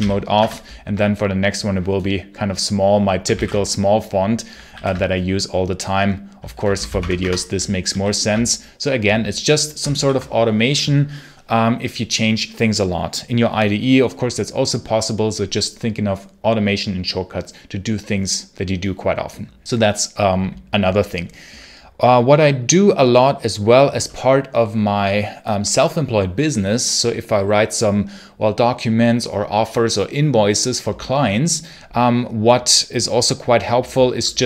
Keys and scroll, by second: 0.2 Return, 2.8-3.8 typing, 4.6 super+q, 6.2-7.2 typing, 7.8 super+q, 9.8 ctrl+l, 34.2-34.4 typing.